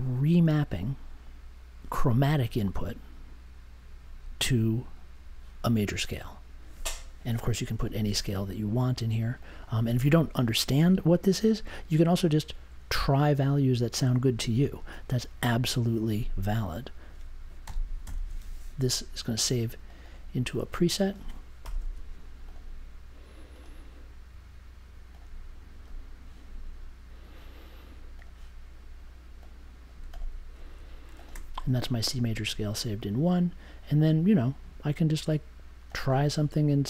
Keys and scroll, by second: 17.4-18.7 typing, 21.6 BackSpace, 21.8 s.